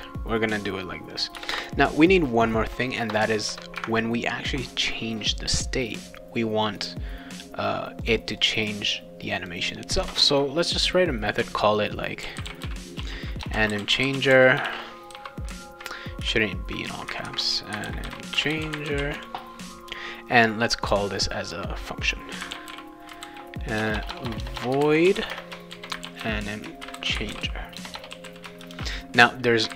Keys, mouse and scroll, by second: 1.1 click, 1.3 Return, 1.6 Return, 3.5 Return, 8.0 click, 8.2 click, 8.4 click, 9.4 click, 12.0-15.6 typing, 17.5-19.6 typing, 20.8 click, 21.1 click, 22.1-29.7 typing.